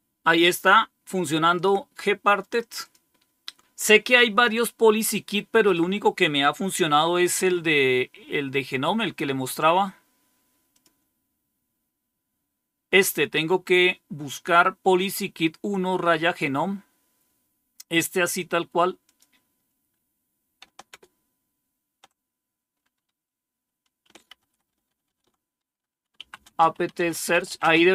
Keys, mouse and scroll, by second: 1.5 click, 2.7 click, 10.6 click, 11.2 click, 14.4-16.3 drag, 19.0 click, 19.6 click, 20.8 super+Return, 24.8 ctrl++, 25.8-27.9 typing.